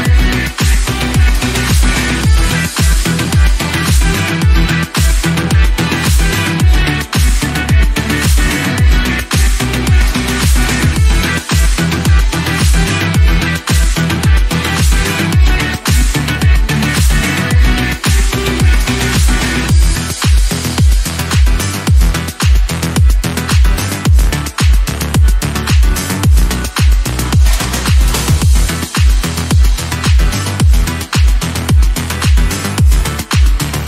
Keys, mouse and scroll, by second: 1.0-1.3 scroll up 3, 1.4 shift+middle click, 1.9 scroll up 2, 8.8 Home, 9.7 scroll down 1, 10.0-13.5 shift+middle drag, 13.5 shift+d, 14.4-14.8 scroll up 1, 14.8-15.8 drag, 15.8 s, 17.4 r, 19.2 r, 20.1 g, 21.4 click, 24.4 click, 25.0 g, 28.7 g, 32.2 s.